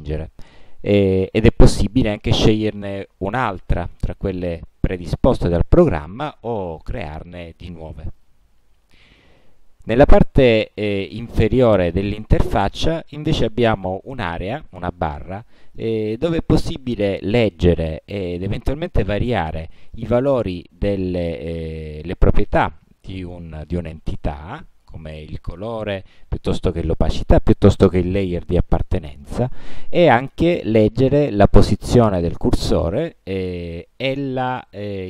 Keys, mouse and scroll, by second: 1.0 click, 8.3 click.